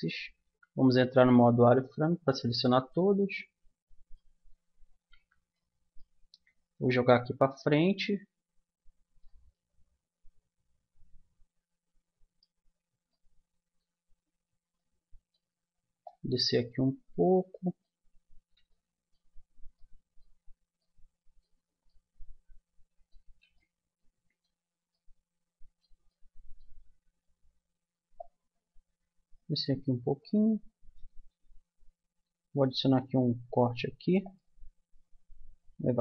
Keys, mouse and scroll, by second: 0.4 z, 1.8 b, 5.2 z, 6.8-8.6 drag, 9.5-11.4 middle drag, 12.7-16.0 middle drag, 16.0-17.2 drag, 17.2 right click, 17.5 click, 17.7-19.8 middle drag, 20.1 middle click, 21.2 middle click, 22.0 middle click, 22.8-25.5 middle drag, 26.4-30.2 middle drag, 33.4 ctrl+r.